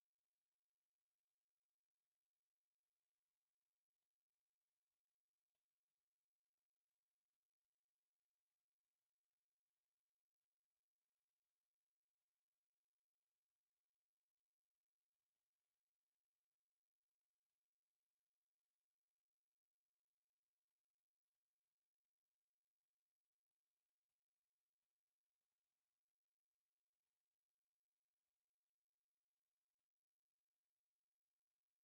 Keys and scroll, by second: 0.8 Escape, 1.9 z, 3.7-6.6 typing, 4.2 Escape, 5.1 Escape, 8.7 c, 10.4 Escape, 11.8 c, 12.1 space, 12.8 Escape, 13.3 s, 13.4 space, 16.0 4, 16.5 0, 16.5 Return, 17.2 Escape, 17.8 m, 17.9 space, 18.4 s, 18.5 space, 19.6 3, 20.0 0, 20.1 Return, 20.6 Escape, 21.4 c, 21.8 space, 24.4 Escape, 26.3 Escape, 28.2 x, 28.8 space, 30.1 Escape, 31.6 Escape.